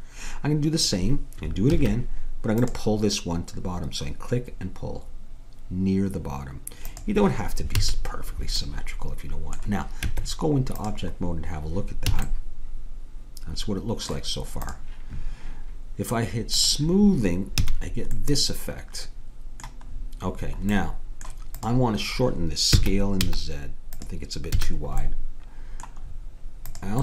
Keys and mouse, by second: 1.7 ctrl+r, 7.8 a, 10.1 Tab, 12.2 a, 13.2 middle click, 14.7-16.5 drag, 16.6-18.4 drag, 17.7 a, 18.4 middle click, 19.3-21.1 middle drag, 21.6-23.9 drag, 22.8 s, 24.6 a, 26.7-27.0 middle drag.